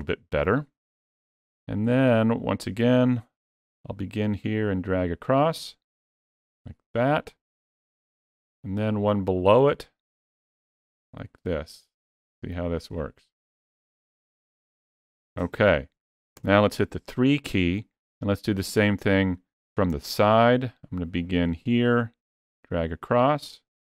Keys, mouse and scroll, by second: 3.3 click, 10.6 click, 16.2 KP_3, 21.3 click.